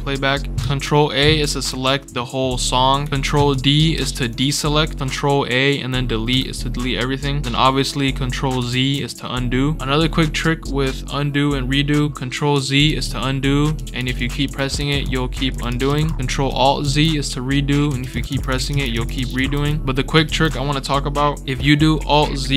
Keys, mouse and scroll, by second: 0.5 ctrl+a, 3.9 ctrl+d, 6.2 Delete, 8.6 ctrl+z, 12.8 ctrl+z, 13.2 ctrl+scroll up 2, 13.7 ctrl+z, 13.9 ctrl+z, 14.1 ctrl+z, 14.4 ctrl+z, 14.7 ctrl+z, 14.9 ctrl+z, 15.4 ctrl+z, 15.6 ctrl+z, 15.8 ctrl+z, 16.0 ctrl+z, 16.8 ctrl+alt+z, 17.8 ctrl+alt+z, 18.0 ctrl+alt+z, 18.2 ctrl+alt+z, 18.4 ctrl+alt+z, 18.6 ctrl+alt+z, 18.9 ctrl+alt+z, 19.1 ctrl+alt+z, 19.3 ctrl+alt+z, 20.2 ctrl+z.